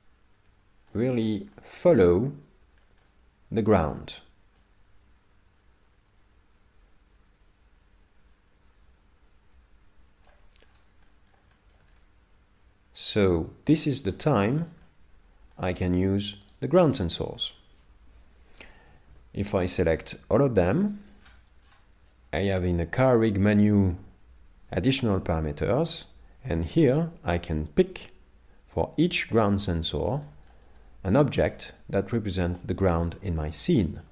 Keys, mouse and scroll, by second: 1.1-1.5 scroll up 5, 1.5 shift+middle click, 2.8 shift+middle click, 4.6 click, 10.6-11.1 scroll down 5, 11.1 middle click, 11.5 shift+middle click, 12.0 middle click, 14.1-14.4 scroll up 4, 14.8 middle click, 16.5 right click, 18.9 a, 19.1 a, 19.8 shift+middle click, 21.2-22.2 scroll down 18, 25.7 shift+middle click, 30.1-30.5 scroll down 3, 30.5 shift+middle click, 31.5 middle click, 33.4 shift+middle click.